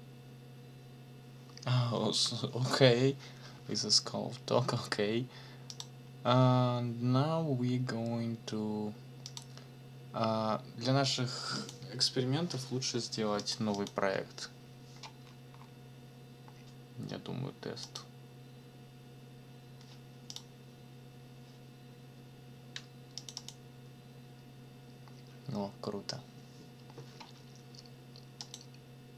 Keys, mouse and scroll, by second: 5.7 click, 9.2 click, 11.5 click, 13.4 click, 17.8 click, 20.3 click, 23.2 click, 28.4 click.